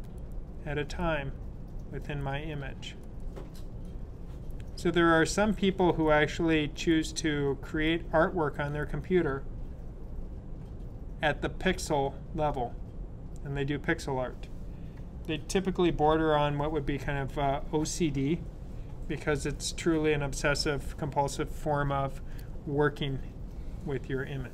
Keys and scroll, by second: 15.7 super+0.